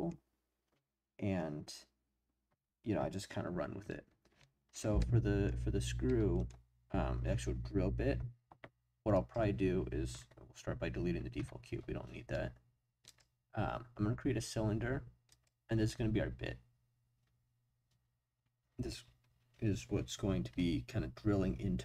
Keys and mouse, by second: 5.0-5.4 middle drag, 6.1-6.5 middle drag, 9.1 click, 11.3 Delete, 13.1-15.4 drag.